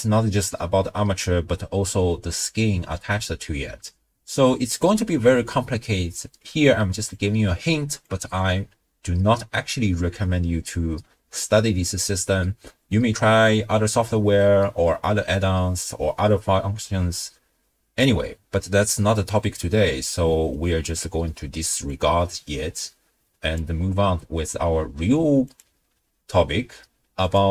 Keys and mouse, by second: 7.1-8.2 drag, 22.0-23.5 drag, 25.5 click, 27.3 click.